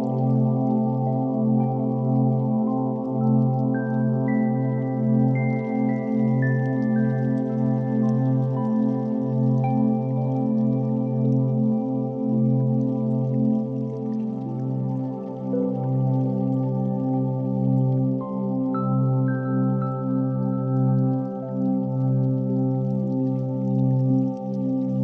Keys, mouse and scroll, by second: 0.0 x, 1.5 Escape, 1.9 r, 2.1 z, 4.8 click, 5.7 r, 5.9 x, 8.1 click, 8.3-11.3 typing, 9.1 click, 10.2 click, 11.0 click, 13.4 click, 13.9 click, 14.6-15.0 shift+middle drag, 17.6-18.6 right drag, 20.0 click, 22.8 z, 24.6 shift+a.